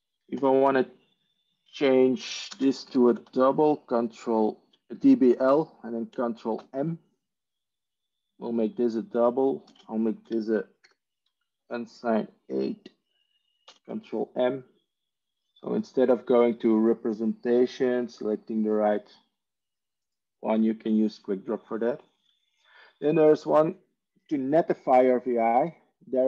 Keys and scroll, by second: 2.4 ctrl+space, 2.4-3.8 typing, 6.4 ctrl+m, 9.5 ctrl+space, 9.9-10.6 typing, 13.5 ctrl+m, 13.5 typing.